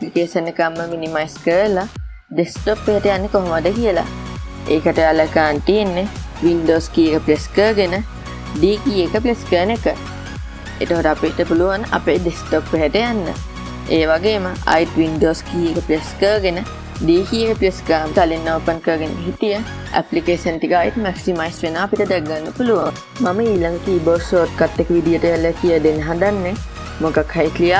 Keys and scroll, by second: 10.1 super+d, 18.1 super+d.